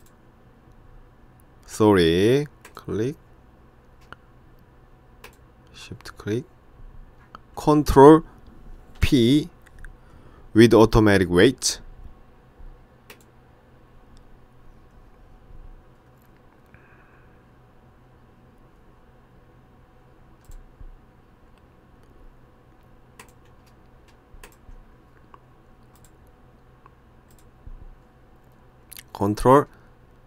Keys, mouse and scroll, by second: 2.7 click, 5.3 shift+click, 9.0 ctrl+p, 20.5 click, 23.3 click, 24.5 shift+click, 26.0 click.